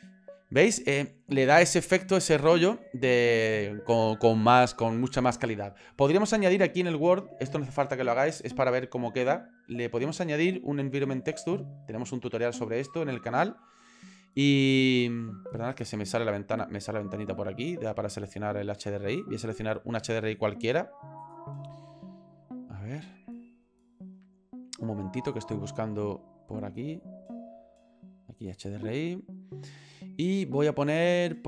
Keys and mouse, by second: 9.5-10.9 drag, 12.8 click.